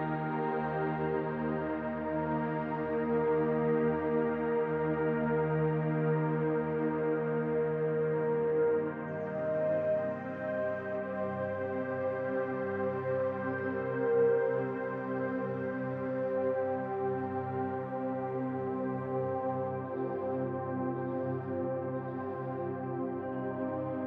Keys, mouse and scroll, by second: 0.7 s, 2.4-2.8 scroll up 1, 2.8 middle click, 3.5 scroll up 1, 5.4-5.8 scroll up 2, 6.1 s, 8.9-10.6 scroll down 3, 9.3 middle click, 10.8 alt+click, 11.3-11.8 scroll down 2, 11.8 shift+middle click, 13.1 ctrl+r, 19.2 alt+click, 20.4 click, 21.4 click.